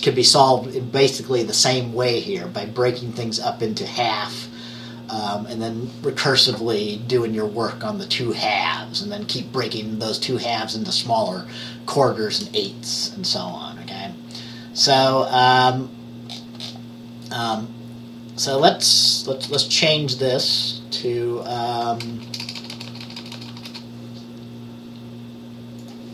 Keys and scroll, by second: 19.5 Return, 22.2-23.6 typing.